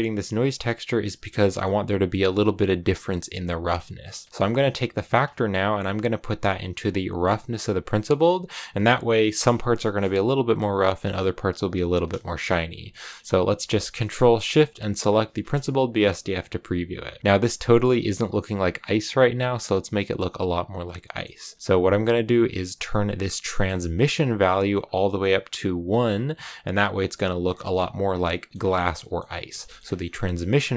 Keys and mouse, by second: 4.0 middle click, 5.0-8.5 drag, 9.7 shift+click, 12.8 middle click, 14.9 ctrl+shift+click, 15.4 click, 20.0 click, 21.0 middle click, 23.5 middle click, 24.6-26.0 drag, 28.2 middle click, 29.0 middle click, 29.6 middle click.